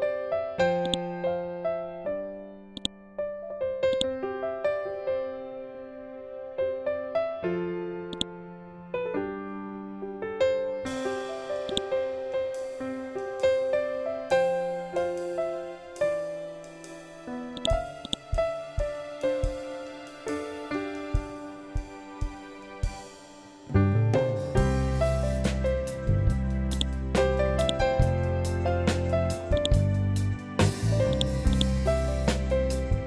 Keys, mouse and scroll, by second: 0.3 click, 1.5 scroll up 1, 2.2 click, 3.4-7.6 ctrl+drag, 7.6-14.6 drag, 17.0 click, 17.8 scroll down 1, 21.3 ctrl+z, 25.4 scroll up 1, 26.2-33.0 drag.